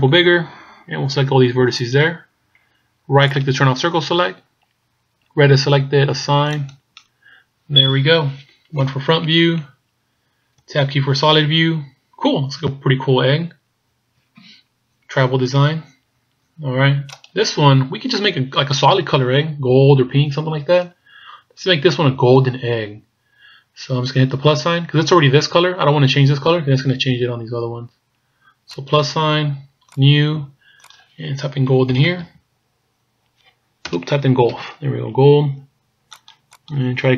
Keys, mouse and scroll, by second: 3.5 right click, 6.6 click, 7.8-8.8 scroll down 2, 8.8 KP_1, 9.6 scroll down 4, 10.8 Tab, 11.5-11.9 scroll down 2, 11.9 scroll up 3, 12.8 scroll down 2, 13.5-14.0 shift+scroll down 1, 14.0-14.6 shift+scroll up 1, 14.6-14.9 ctrl+scroll down 1, 15.0 ctrl+scroll up 1, 17.2 right click, 28.8 click, 29.9 click, 30.9 click, 36.7 click.